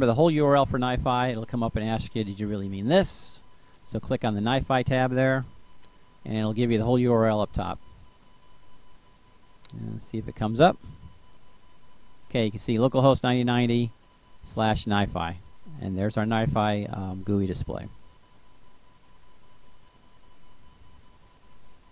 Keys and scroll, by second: 0.0 Return.